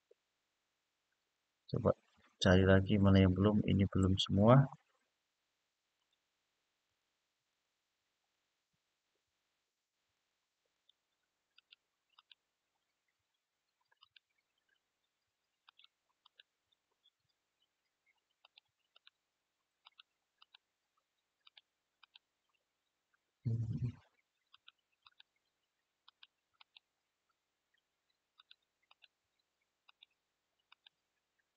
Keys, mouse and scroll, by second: 1.9-3.7 middle drag, 5.7 alt+shift+click, 6.6 alt+shift+click, 7.2 alt+shift+click, 8.3 scroll up 2, 9.9 alt+shift+click, 10.4 alt+shift+click, 11.3 alt+shift+click, 11.9 alt+shift+click, 13.7 alt+shift+click, 15.4 alt+shift+click, 16.0 alt+shift+click, 16.7-17.5 scroll up 1, 18.2 alt+shift+click, 18.7 alt+shift+click, 19.6 alt+shift+click, 20.1 alt+shift+click, 21.2 alt+shift+click, 21.7 alt+shift+click, 22.6-23.4 scroll down 1, 24.2 alt+shift+click, 24.7 alt+shift+click, 25.8 alt+shift+click, 26.3 alt+shift+click, 28.1 alt+shift+click, 28.6 alt+shift+click, 29.6 alt+shift+click, 30.4 alt+shift+click.